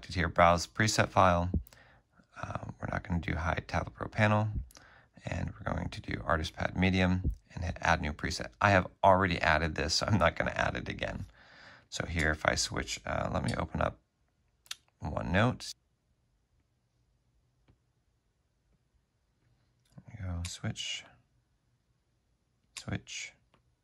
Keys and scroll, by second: 9.1 BackSpace, 9.2 space, 11.9 space, 20.3 alt+Tab, 21.2 alt+Tab, 22.9 alt+Tab.